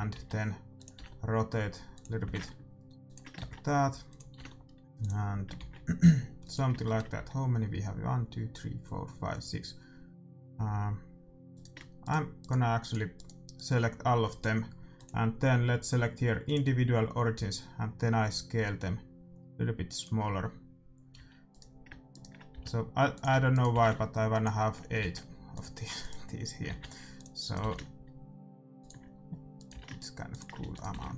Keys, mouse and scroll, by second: 0.1 shift+d, 0.9 r, 2.2 g, 3.4 shift+d, 4.3 r, 5.5 shift+d, 6.8-8.7 middle drag, 7.1 a, 11.8-15.4 right drag, 11.8 shift+e, 14.9-16.6 drag, 17.3 s, 21.1 a, 21.8-25.4 right drag, 22.5 g, 23.2 a, 23.8 g, 25.0 shift+d, 26.3-29.1 right drag, 27.8 g, 29.8-31.1 right drag, 29.8 g, 30.5 a.